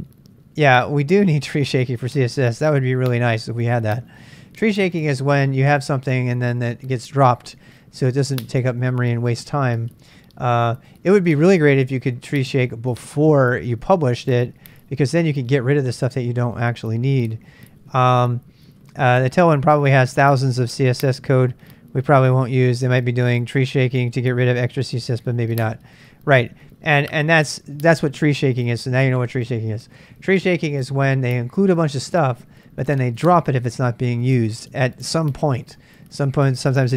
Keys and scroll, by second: 4.0 super+Tab.